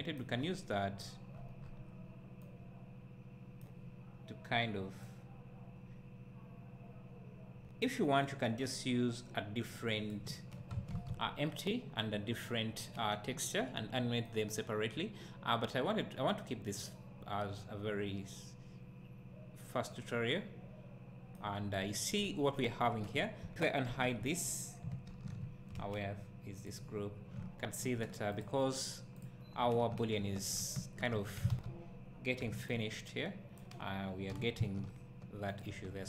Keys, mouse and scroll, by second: 0.3 scroll up 1, 5.2-14.3 drag, 11.4 scroll down 1, 14.3-24.6 right drag, 22.8 scroll down 1, 24.6 click, 26.6 click, 27.4 `, 28.4 click, 30.0 Tab, 30.8 `, 31.2 1, 31.5 alt+a, 33.6 b.